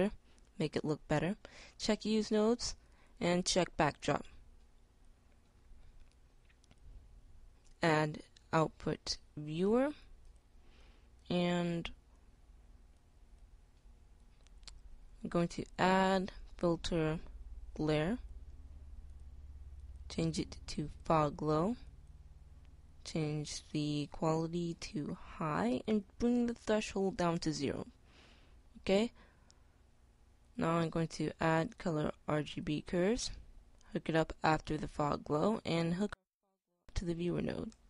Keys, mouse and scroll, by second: 21.6-25.6 drag, 26.2-28.1 drag, 33.2-34.1 drag, 35.5-37.4 drag.